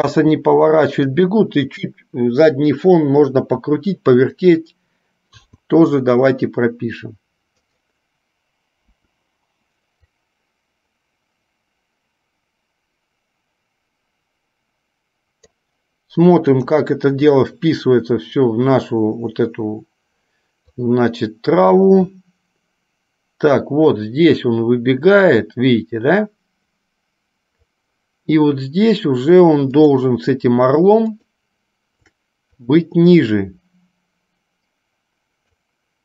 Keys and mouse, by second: 0.3 r, 9.1 Delete, 10.3-15.8 drag, 17.3 click, 20.9-28.0 drag, 29.9 click, 33.0-35.9 drag.